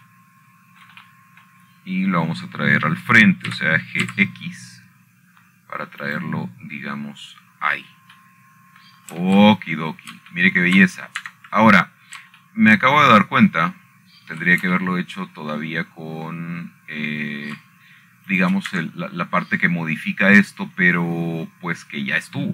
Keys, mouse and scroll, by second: 1.4 click, 1.9-3.3 scroll up 1, 3.6 shift+middle click, 4.2-5.5 middle drag, 4.4-5.5 scroll down 1, 6.2 g, 6.8 x, 8.8 click, 9.4-9.7 scroll up 1, 9.7 scroll down 2, 11.9 shift+middle click, 12.4-13.3 shift+scroll up 5, 13.1-14.5 shift+middle drag, 14.5-15.6 scroll up 1, 17.1-17.5 shift+middle drag, 20.2 shift+middle click, 21.0 click.